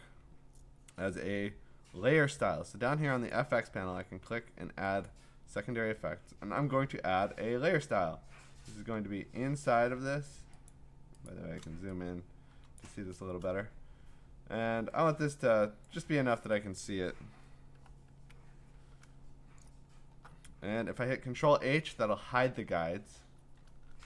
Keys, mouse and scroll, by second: 1.2 Escape, 3.3 click, 5.1 click, 8.8 click, 8.8 alt+scroll, 9.6-10.3 scroll, 10.7 ctrl+click, 11.3 ctrl+click, 12.3 5, 12.8 click, 15.9 click, 17.7 6, 18.2 Return, 19.3-20.2 scroll, 21.1 ctrl+h, 23.9 ctrl+h.